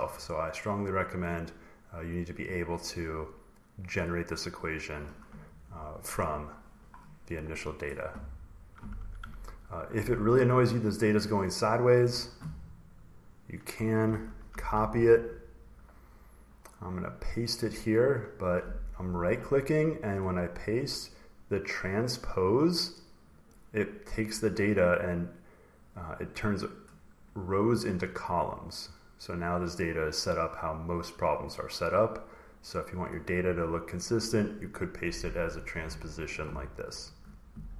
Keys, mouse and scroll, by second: 0.9 click, 1.3 click, 6.2-7.7 scroll, 7.7 click, 7.7 scroll, 9.2-10.2 ctrl+scroll, 10.2 scroll, 11.9 click, 12.3 scroll down 2, 13.6 click, 14.4 ctrl+c, 15.6 click, 15.9-16.5 scroll down 7, 17.3 click, 17.7 scroll, 18.2 right click, 23.2 click, 24.3 click, 26.6 click, 29.3-30.7 scroll, 30.7-31.3 scroll, 31.3 click, 32.9 scroll down 4, 33.0 click, 36.8 click.